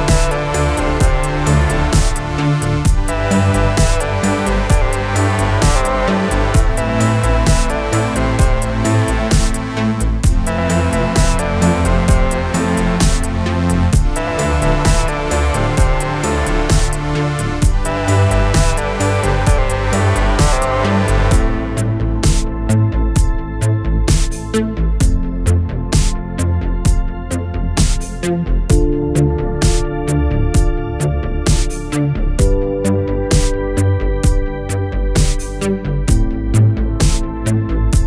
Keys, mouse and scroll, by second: 0.1 scroll down 1, 0.4 middle click, 1.2 shift+click, 1.6 shift+click, 1.9 scroll down 2, 2.2 middle click, 3.1 click, 3.5 scroll down 2, 3.8-5.3 middle drag, 5.3 scroll up 2, 5.6 middle click, 6.0 alt+a, 6.7-8.0 middle drag, 8.0 click, 8.6-8.9 scroll down 3, 9.3-10.0 middle drag, 10.0 scroll up 2, 11.0-14.8 middle drag, 14.8-15.4 scroll up 2, 15.4-17.2 middle drag, 17.2-17.6 scroll up 2, 17.6 3, 18.1 click, 20.1-20.4 scroll up 3, 20.4-21.9 shift+middle drag, 21.9 scroll up 1, 22.2-24.1 middle drag, 24.1 click, 26.1 click, 27.0 click, 27.8 shift+click, 29.8-37.4 drag, 37.4 scroll down 2, 37.6-38.0 middle drag.